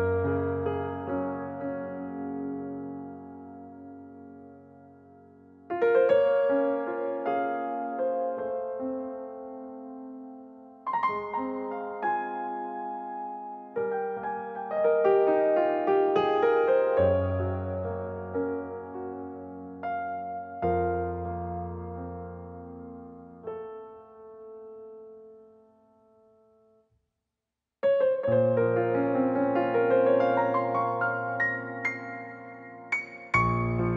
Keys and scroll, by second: 0.5 Escape, 0.6 Escape, 14.5 e, 21.7 space, 31.0 space.